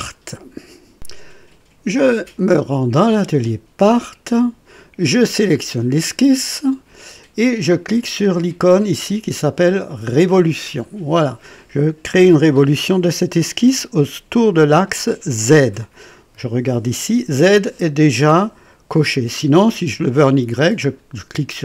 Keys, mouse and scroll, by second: 0.9 click, 2.3 click, 3.7 click, 5.3 click, 10.8 click, 20.3 click.